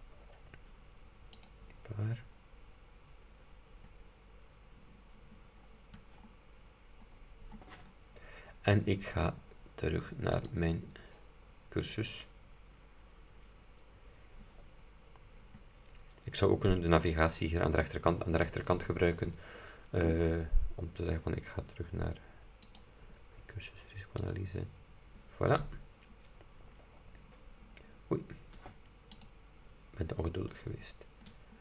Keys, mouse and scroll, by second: 0.0 scroll down 2, 1.5 click, 5.8-7.4 scroll down 6, 7.6-8.2 scroll up 2, 10.5 click, 22.8 click, 24.3 click, 26.0-26.5 scroll down 2, 26.9 scroll down 2, 29.2 click, 31.4-31.6 scroll down 2.